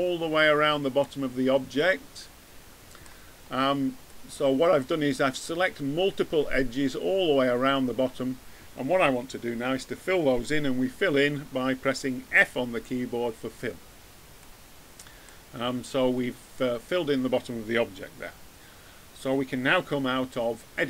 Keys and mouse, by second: 12.3 f, 13.8 middle click, 14.8 middle click.